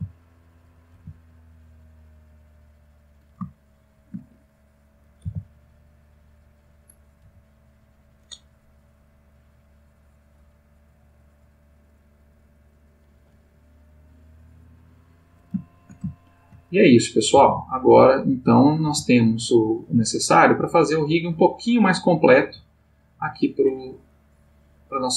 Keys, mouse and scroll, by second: 0.7 click, 0.9 g, 3.0 click, 3.5-4.2 shift+middle drag, 4.8 click, 5.2 r, 6.4 click, 7.1 click, 7.2 g, 8.0 click, 9.0-10.4 drag, 12.9 click, 13.9-15.4 drag, 15.6-16.7 shift+middle drag, 17.1 click, 17.3 g, 18.3 click, 18.7 click, 18.9 g, 19.7 click, 20.2 click, 20.4 g, 21.3 click, 21.9 click, 22.4 g, 23.0 click, 24.1-25.1 drag.